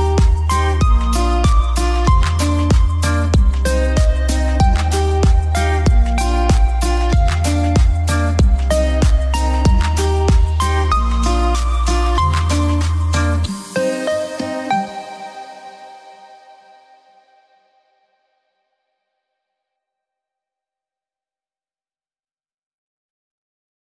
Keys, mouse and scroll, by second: 1.9 F2, 2.0-10.0 drag, 10.0-11.2 drag, 11.2 ctrl+g, 11.7 F12, 12.6 click, 13.0 5, 13.7 click, 17.8 click, 18.2 F3.